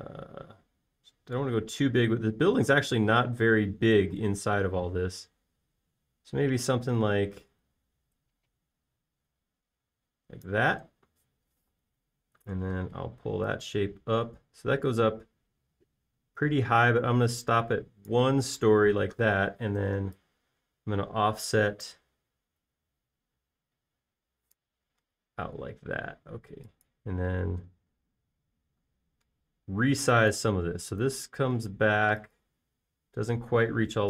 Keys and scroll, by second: 13.1 p, 21.2 f, 26.6 space, 33.2 m.